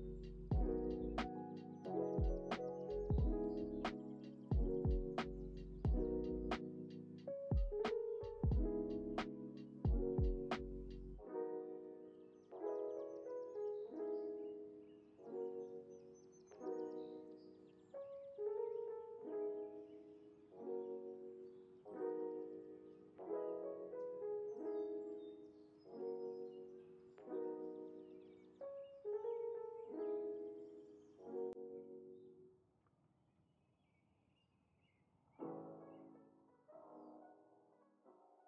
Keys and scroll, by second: 5.3 ctrl+s, 10.8 ctrl+c, 12.9 ctrl+c, 14.5 ctrl+c, 15.8 ctrl+c, 15.8 ctrl+v, 17.3 ctrl+c, 17.4 ctrl+v, 18.5 ctrl+c, 19.7 ctrl+c, 21.1 ctrl+c, 22.2 ctrl+c, 23.2 x, 26.7 space, 32.9 space, 33.4 z, 36.0 ctrl+c, 36.0 ctrl+v, 37.2 ctrl+c.